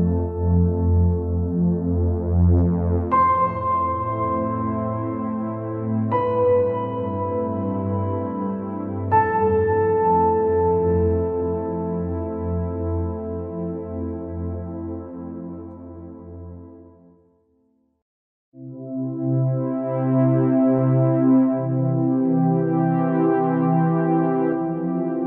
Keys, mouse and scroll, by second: 0.1 click, 1.5 click, 2.4-2.8 scroll down 3, 2.9 scroll up 2, 3.2 scroll down 1, 3.8-5.2 drag, 5.2 scroll up 2, 5.4 scroll down 2, 5.5-6.7 middle drag, 6.7-7.1 scroll up 2, 7.1 scroll down 1, 7.2-10.4 middle drag, 12.4 alt+click, 13.3 alt+click, 14.0 alt+click, 15.5 scroll up 1, 16.4 ctrl+b.